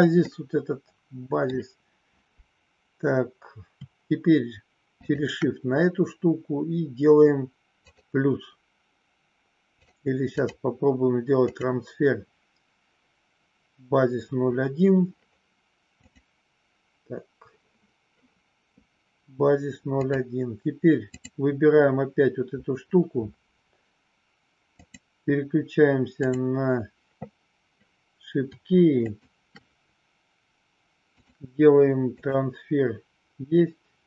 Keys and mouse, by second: 0.4 middle click, 4.8 shift+click, 10.5-11.7 drag, 16.0 click, 21.1 click, 24.7 click, 29.0 shift+click, 31.0-32.5 drag.